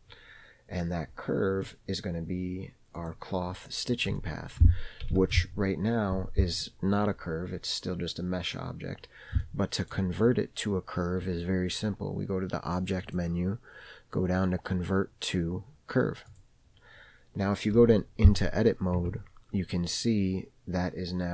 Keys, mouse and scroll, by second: 1.4-1.9 scroll down 2, 1.9 middle click, 3.2 click, 4.4-4.9 shift+scroll up 1, 4.9 shift+middle click, 5.4 alt+z, 9.7-10.2 shift+middle drag, 13.3-16.7 drag, 19.4 Tab.